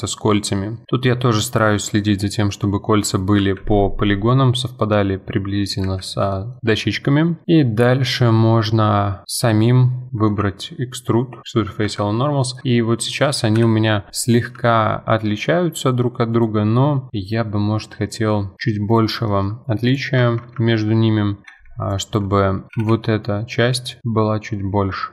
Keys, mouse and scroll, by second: 1.2-1.5 scroll up 2, 1.5-3.4 middle drag, 3.4 F4, 3.7-4.1 middle drag, 4.1-5.1 scroll down 1, 5.1-5.9 scroll down 1, 5.9 F4, 6.3-7.7 middle drag, 10.3 alt+e, 11.8 Escape, 12.1 scroll down 2, 12.3 middle click, 12.6 Tab, 12.8-13.6 scroll down 1, 13.6 KP_1, 14.1 scroll up 3, 14.7-15.2 shift+middle drag, 15.2-16.3 scroll up 1, 16.3 click, 18.9 click, 19.3-19.9 shift+middle drag, 19.9 click, 20.2 Tab, 20.6 shift+middle click, 21.0-21.4 scroll up 2, 21.4 2, 21.8 alt+click, 22.7 g.